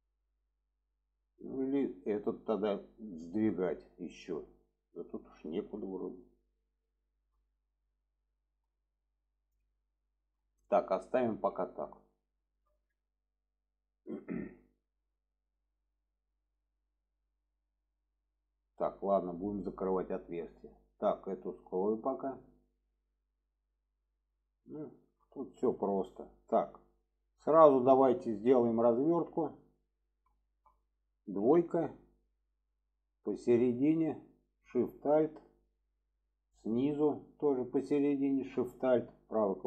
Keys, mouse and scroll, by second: 0.4-1.5 middle drag, 2.1 middle click, 3.0-4.4 middle drag, 5.4 shift+middle drag, 5.9-6.6 middle drag, 7.0 shift+middle drag, 7.4-8.4 middle drag, 9.0-10.0 middle drag, 10.5-11.3 middle drag, 11.6 shift+middle drag, 12.3 shift+middle drag, 13.2 shift+middle click, 14.1-14.4 shift+middle drag, 15.8-18.5 middle drag, 19.0 middle drag, 19.8 shift+middle click, 22.1 click, 22.7 middle drag, 23.4 middle click, 24.1 middle click, 24.9 shift+middle click, 25.5 middle drag, 26.4 middle drag, 27.1-29.8 middle drag, 30.5 shift+middle click, 33.2 click, 35.8-36.8 middle drag, 38.1 alt+shift+click, 39.0 right click.